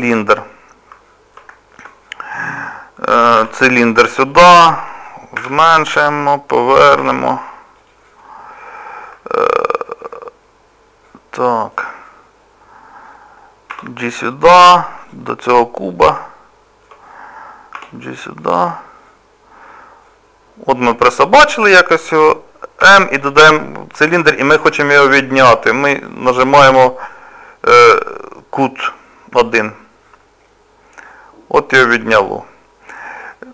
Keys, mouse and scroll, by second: 0.5 middle click, 1.6 shift+middle click, 3.4 g, 5.4 s, 7.0 r, 8.3 middle click, 13.7 g, 15.4 middle click, 17.8 g, 19.0 middle click, 21.1 shift+middle click, 22.8 m, 30.5 middle click.